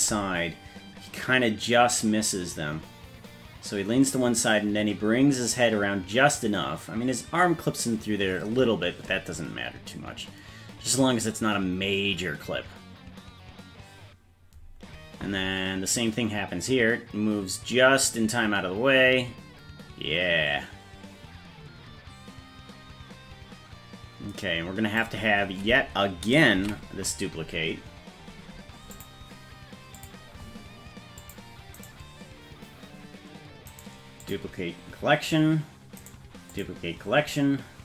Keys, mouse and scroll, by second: 26.7 ctrl+s, 28.9 click, 29.9 click, 31.2 click, 31.7 right click, 33.6 right click, 36.0 right click.